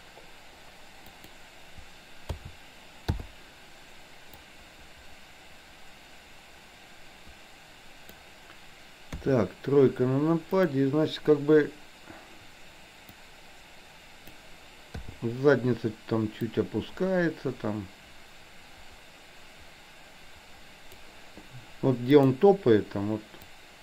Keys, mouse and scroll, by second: 2.5 a, 3.1 i, 4.5-8.5 drag, 9.2 KP_3, 10.6 click, 13.3-14.5 drag, 15.1 i, 16.5-21.1 drag, 22.2 click, 23.6-23.8 drag.